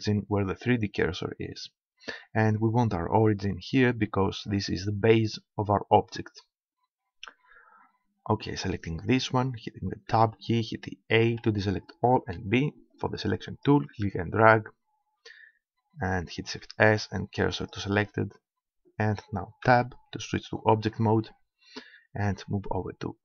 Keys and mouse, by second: 9.0-10.8 right drag, 10.1 Tab, 11.3 a, 12.3 b, 16.5 shift+s, 19.7 Tab.